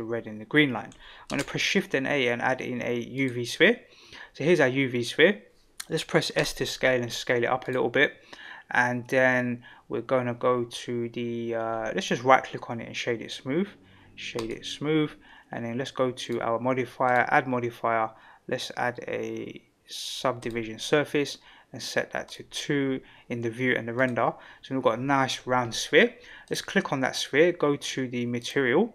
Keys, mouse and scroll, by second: 1.3 shift+a, 6.4 s, 12.0-14.5 right drag, 16.2 click, 17.1-20.5 drag, 22.2 click, 23.9 click, 26.4 click, 28.3 click.